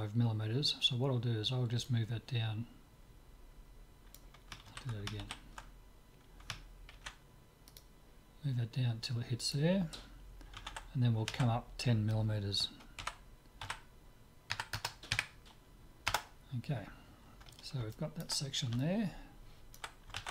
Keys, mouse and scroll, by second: 1.8-3.8 drag, 4.7 ctrl+z, 5.3 ctrl+z, 6.9 ctrl+r, 13.0 g, 17.9-20.3 middle drag.